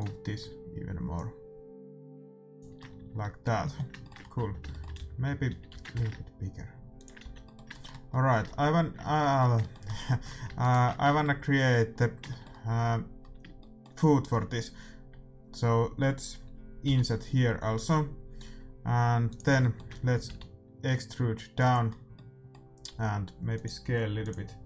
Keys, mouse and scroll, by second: 0.7 middle click, 2.8-4.0 middle drag, 2.9 a, 4.3 Tab, 4.9 a, 5.1 a, 5.4 a, 5.6 s, 7.2 a, 9.7 middle click, 10.6-12.4 right drag, 13.7-16.8 middle drag, 16.8 i, 19.5 middle click, 20.2 e, 22.8 s.